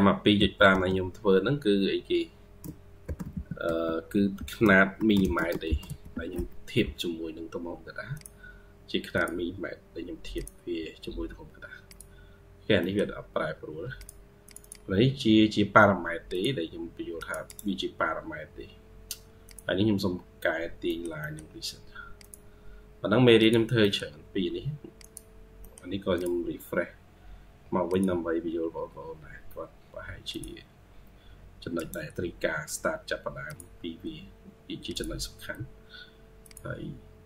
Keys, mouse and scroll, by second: 0.2 typing, 4.0-6.7 typing, 12.4 scroll down 1, 12.7 middle click, 14.3 double click, 14.5 double click, 17.3 right click, 20.7 middle click, 21.1 middle click, 23.7 middle click, 25.2 scroll down 1, 25.5 middle click, 31.6 right click.